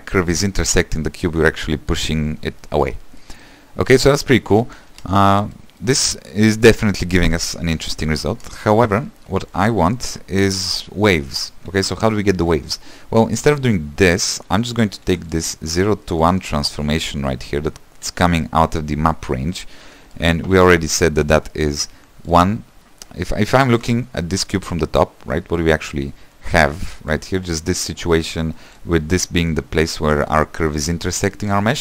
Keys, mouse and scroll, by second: 0.2 scroll up 2, 0.4-2.2 middle drag, 2.2-2.6 scroll down 2, 2.6 shift+middle click, 3.0 scroll up 1, 3.2-5.0 middle drag, 5.0 space, 5.6-8.5 middle drag, 8.5 space, 13.9 alt+click, 14.2 x, 21.9-31.8 drag.